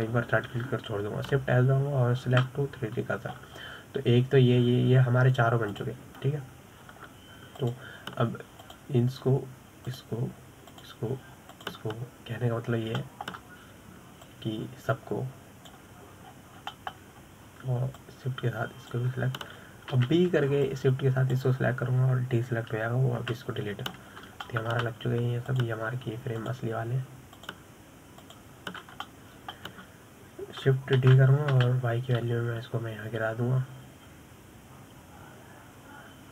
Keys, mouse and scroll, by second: 0.8 shift+d, 2.8 shift+s, 4.8-7.2 scroll down 5, 7.2 click, 7.7-9.0 scroll up 2, 9.0 click, 10.1 click, 11.3 shift+drag, 12.2 shift+drag, 13.0 shift+click, 13.9-14.5 scroll down 6, 14.5-15.7 shift+middle drag, 15.7 drag, 17.7-18.2 scroll down 3, 18.2-18.6 shift+middle drag, 18.6 scroll up 4, 19.5 shift+click, 21.4 b, 24.8 Delete, 25.4-25.9 scroll up 4, 25.9-26.9 shift+middle drag, 26.9 click, 27.9 shift+drag, 28.8 shift+click, 29.7 shift+click, 30.5-32.5 shift+middle drag, 32.5 shift+d.